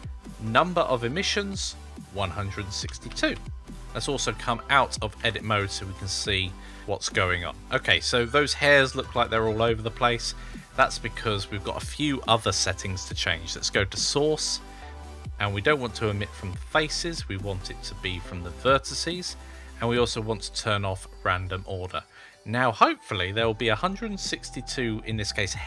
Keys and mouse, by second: 1.5-3.8 drag, 5.0 Tab, 6.6-9.1 middle drag, 13.8 click, 17.0-18.5 drag, 20.3 click.